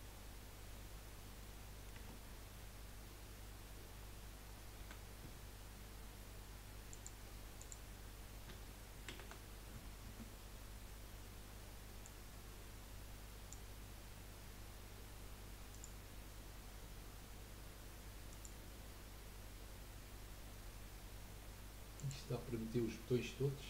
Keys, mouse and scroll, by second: 1.9 Tab, 4.8 a, 6.9-9.1 drag, 9.1 shift+d, 12.0 click, 15.8 click, 22.0 click, 22.5-23.4 scroll up 1, 23.4-23.6 middle drag.